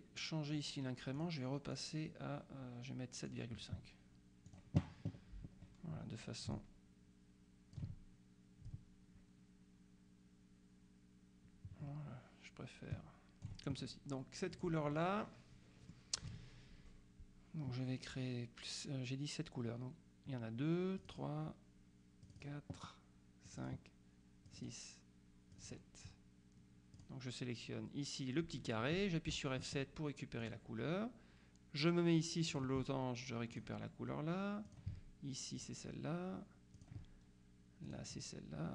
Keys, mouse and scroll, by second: 1.3 click, 4.6 click, 6.6-8.3 ctrl+drag, 8.7-14.0 ctrl+drag, 14.6 click, 21.1 click, 22.3 click, 23.6 click, 24.6 click, 25.6 click, 27.1 click, 29.4 F7, 30.5 click, 32.6 click, 33.6 click, 34.7 click, 35.6 click, 36.8 click, 37.9 click.